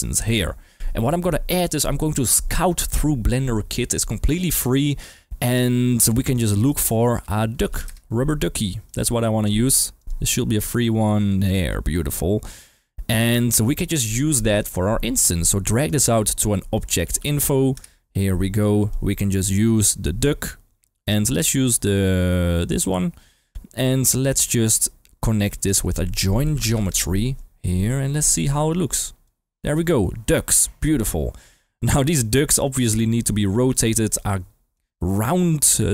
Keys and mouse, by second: 6.7-7.9 drag, 8.8 click, 10.0 click, 11.5 click, 15.8 drag, 18.8 click, 19.5-22.7 drag, 25.7 shift+a, 27.8 drag, 28.3-29.2 drag, 31.0 click, 31.8 g, 32.9 click, 33.4 g, 33.7 click, 34.2-34.7 drag, 35.0-35.9 middle drag.